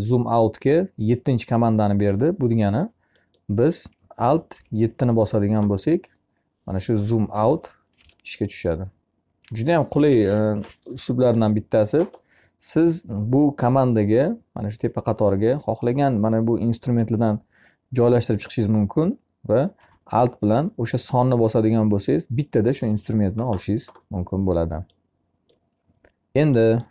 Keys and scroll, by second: 3.9 7, 7.8 alt+7.